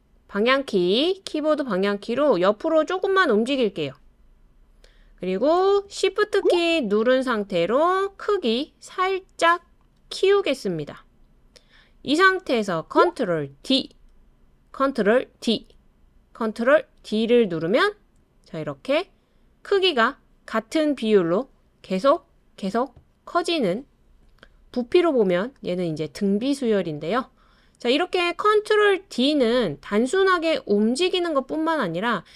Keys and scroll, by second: 1.0 Right, 1.1 Right, 1.2 Right, 1.3 Right, 1.4-2.3 Right, 13.7 super+d, 15.3 super+d, 17.0 super+d, 18.6 super+d, 22.4 super+d.